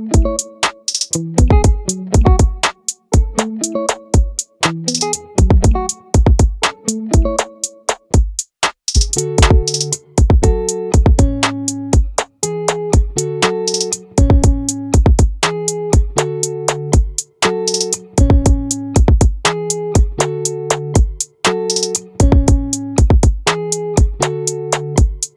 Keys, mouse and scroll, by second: 5.0-6.8 drag, 10.7 click, 15.5 click, 16.4 ctrl+z, 18.3 middle click, 19.3-22.1 right drag, 22.3 click, 23.2 ctrl+z, 23.7 right click, 24.6 click.